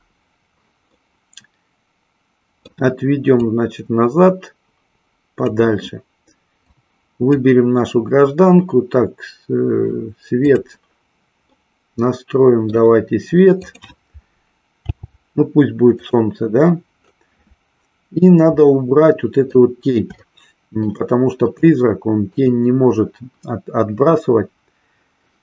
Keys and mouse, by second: 1.0-2.8 middle drag, 3.3-5.6 drag, 6.6 click, 10.8 click, 11.6-13.0 middle drag, 13.7 click, 15.1 g, 16.1 click, 18.8-19.8 middle drag, 20.2 shift+middle click, 21.8 shift+middle click.